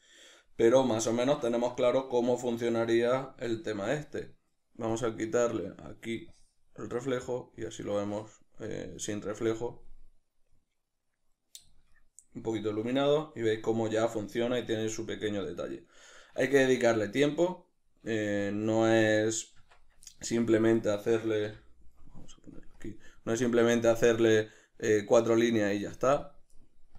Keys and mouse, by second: 5.1 click, 9.9-19.1 middle drag, 18.4 Tab, 19.1 right click, 20.1 middle click, 20.8 right click.